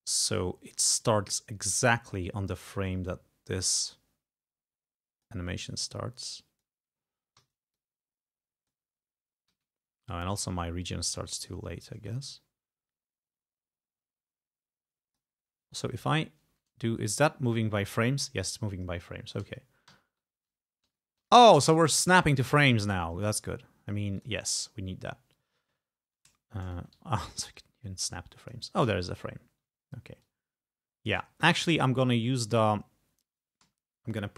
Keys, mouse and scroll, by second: 0.0 ctrl+g, 0.0 ctrl+scroll up 2, 0.6 ctrl+scroll down 2, 1.0-5.5 ctrl+drag, 6.3 click, 7.4 e, 7.8-8.9 drag, 9.5 g, 10.1-11.3 drag, 11.7 ctrl+scroll down 2, 12.1-15.4 ctrl+drag, 16.2 Right, 16.6 Left, 17.1 Right, 17.5 Left, 17.9 Right, 18.3 Left, 18.6 Right, 19.1 Left, 19.4 Right, 19.9 Left, 20.9 Right, 22.6 click, 23.4-24.0 ctrl+scroll up 4, 24.2 ctrl+click, 25.9 ctrl+scroll up 2, 27.0 e, 27.6-28.7 drag, 29.0-29.5 ctrl+scroll up 4, 30.3-31.3 drag, 31.3 ctrl+scroll down 2, 32.1 ctrl+click, 33.7 g.